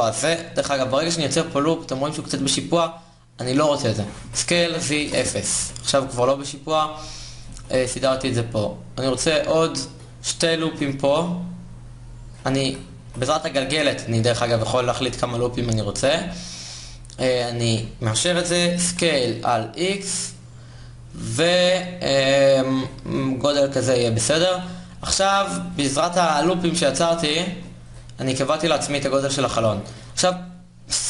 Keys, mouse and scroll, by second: 0.7 click, 3.8 s, 5.2 KP_1, 6.2 g, 7.2 a, 7.8 ctrl+r, 10.4 s, 12.3 ctrl+z, 12.7 ctrl+r, 18.5 s, 22.9-26.2 drag, 26.2 ctrl+Tab.